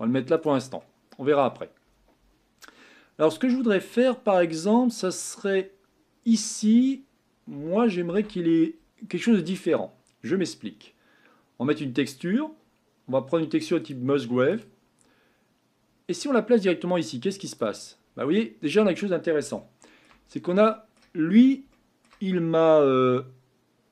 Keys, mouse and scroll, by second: 17.6-18.1 drag, 18.1-18.5 scroll up 5, 19.6-20.3 shift+middle drag, 20.3-20.7 scroll down 1, 20.7-21.2 middle drag, 21.2-21.7 scroll up 4, 21.7-23.9 shift+middle drag.